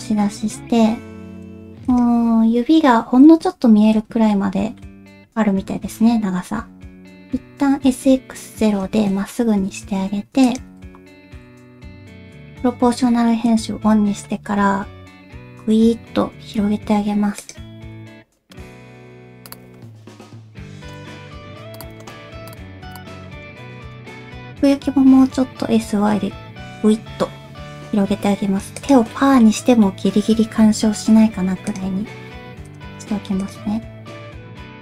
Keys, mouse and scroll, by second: 4.4 shift+middle click, 7.8 s, 11.1 shift+middle click, 12.2 o, 13.3 middle click, 13.7 g, 18.0 g, 20.8 shift+middle click, 21.3 g, 22.0 shift+middle click, 22.9 g, 23.1 middle click, 23.7 middle click, 24.5 middle click, 25.0 s, 29.3 middle click, 29.8 middle click, 30.6 KP_3, 32.2 g, 33.5-34.8 drag.